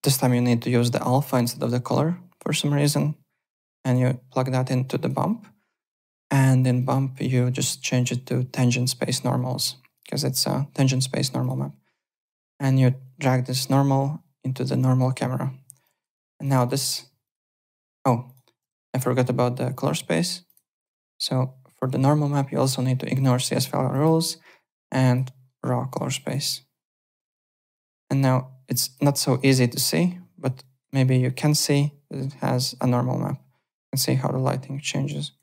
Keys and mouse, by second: 2.9 click, 4.9 click, 6.7 click, 8.3 click, 9.9 click, 11.4 click, 12.0 click, 13.2 click, 15.8 click, 16.2 alt+click, 17.2 click, 18.2 click, 18.6 m, 19.5 click, 20.4 click, 21.8 click, 23.1 click, 23.9 click, 25.0 click, 26.2 click, 26.9 click, 27.1 z, 27.3 alt+click, 29.3 alt+click, 30.6 alt+right click, 30.9 alt+click, 35.2 alt+right click.